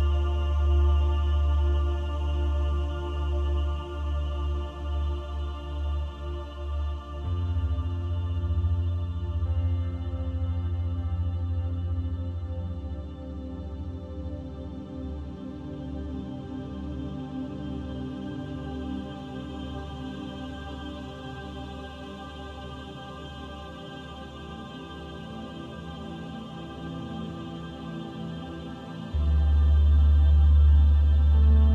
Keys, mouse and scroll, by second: 1.0 click, 4.2 click, 8.4 click, 11.3 click, 17.0 click, 20.6 click, 23.0 click, 24.2-24.7 scroll down 1, 24.7 scroll down 7, 25.5 scroll down 6, 26.1 scroll down 4, 28.7 click, 30.9 click.